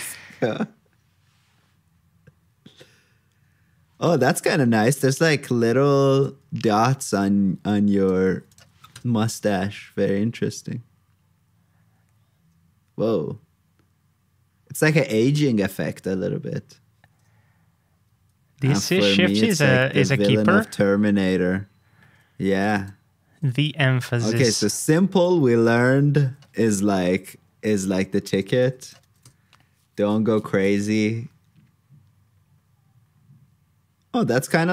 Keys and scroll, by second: 6.6 super+s, 8.3 super+c, 8.7 super+v, 19.9 alt+shift+Down, 20.4 super+Tab, 23.6 super+c, 23.8 super+Tab, 26.1 super+v, 28.5 super+c, 29.0 super+v.